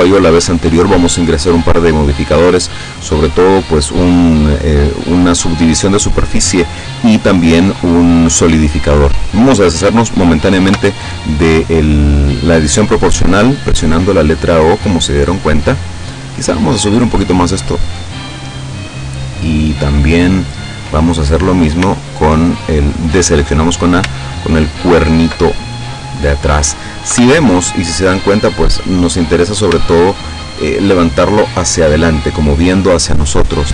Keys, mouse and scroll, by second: 10.7 o, 13.3-15.7 middle drag, 15.8 middle click, 16.8-18.1 drag, 21.5-21.8 scroll up 1, 21.9 a, 24.9 alt+shift+right click, 25.6-26.9 alt+shift+middle drag, 27.2 KP_7, 28.8-29.3 scroll up 1, 29.6 scroll up 1, 29.9 shift+middle click, 33.1 middle click.